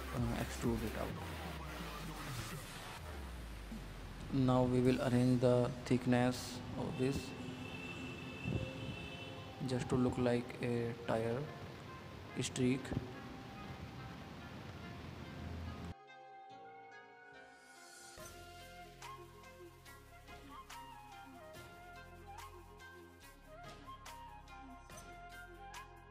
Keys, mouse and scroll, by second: 4.3 click, 5.5-6.7 drag, 6.7 middle click, 7.0 scroll up 2, 7.3-8.8 middle drag, 9.0-10.5 drag, 11.2-12.4 middle drag, 12.4 scroll down 1, 12.6-13.0 middle drag, 13.0 scroll up 1, 13.1-14.5 middle drag, 14.5-16.0 drag, 16.1-17.3 drag, 17.3-18.3 middle drag, 18.3 click, 19.2 click, 19.6 click, 19.9-20.9 middle drag, 20.9 click, 21.2 click, 21.5 middle click, 22.2 scroll down 2, 22.4 middle click, 23.2 click, 23.4 middle click, 23.6 scroll up 2, 23.7-24.8 middle drag, 24.8-26.1 drag.